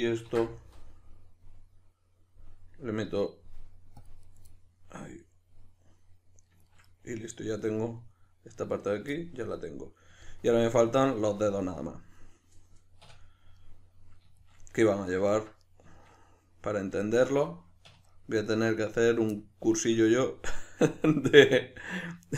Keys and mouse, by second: 0.3 ctrl+r, 4.3 right click, 4.5-19.1 middle drag, 13.0 \, 17.8 1, 19.1 right click, 19.3-22.3 middle drag.